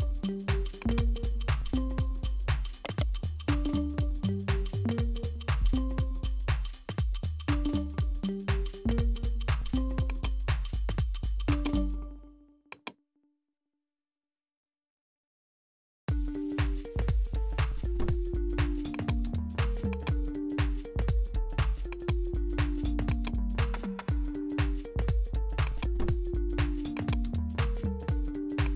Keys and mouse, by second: 0.8 click, 2.8 right click, 3.8 h, 5.7 alt+h, 6.7 g, 11.5 click, 12.8 click, 14.3-16.8 drag, 16.8 g, 19.9 click, 21.9 click, 23.1 click, 25.6-28.0 drag.